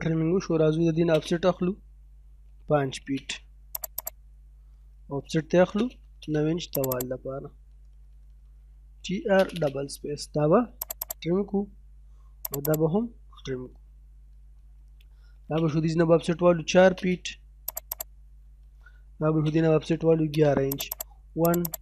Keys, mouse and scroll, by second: 0.8 o, 0.9 space, 2.3 5, 3.0 space, 3.8 click, 4.4-5.4 scroll up 1, 5.4 o, 5.6 space, 5.8 9, 6.0 space, 6.8 click, 7.2 middle click, 7.7 scroll down 1, 7.9 middle click, 8.2-8.8 scroll up 1, 8.6-9.5 typing, 9.6-9.9 scroll up 1, 10.9 click, 11.3-11.8 scroll down 1, 12.5 click, 13.0-13.3 scroll down 1, 13.3 middle click, 13.6 scroll down 1, 13.9 middle click, 14.2-14.9 scroll up 1, 15.2 o, 15.3 space, 16.0 4, 16.8 space, 17.7 click, 19.1-20.1 typing, 20.8 click.